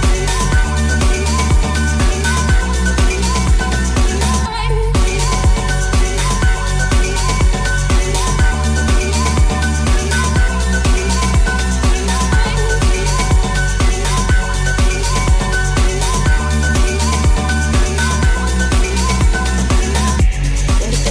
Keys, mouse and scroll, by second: 0.0-1.3 shift+middle drag, 1.3 right click, 1.4-5.8 middle drag, 5.8-9.9 drag, 5.8 right click, 6.1 middle click, 6.1 right click, 7.3 g, 9.9-16.9 shift+middle drag, 10.2 s, 11.8 g, 13.7 g, 16.7 ctrl+s, 17.0-18.2 middle drag, 18.2 click, 19.5 click, 19.6-21.1 drag.